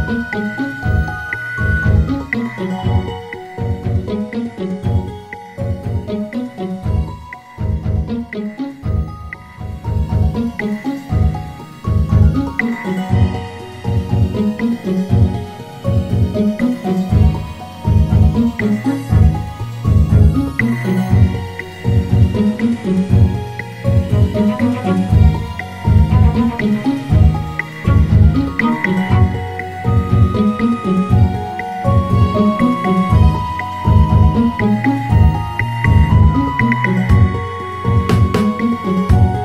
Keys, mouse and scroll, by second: 1.5-4.6 drag, 8.8-11.8 drag, 15.4 click, 18.0 click, 21.3-22.7 drag, 25.3-28.4 drag, 30.8-33.8 drag, 37.8-39.4 drag.